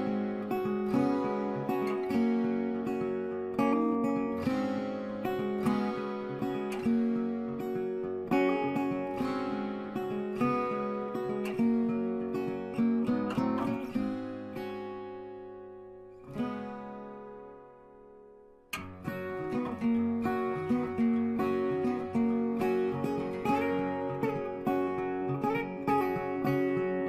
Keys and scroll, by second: 0.8 z.